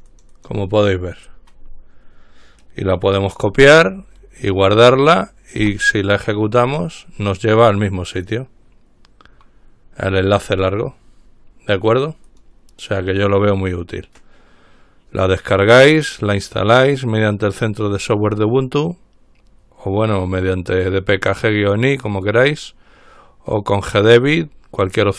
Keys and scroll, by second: 5.8 Return.